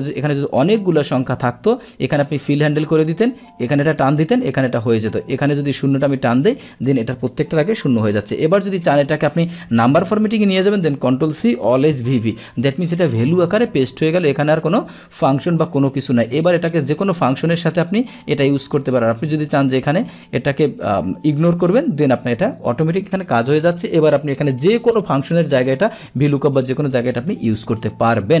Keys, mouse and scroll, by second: 0.7 click, 1.6 click, 3.4 click, 5.9 click, 8.8-10.6 drag, 11.2 ctrl+c, 13.5 click, 14.6 click, 17.4-18.5 drag, 19.5 click, 21.4 click, 22.0 click, 23.1 Escape, 24.1-25.8 drag.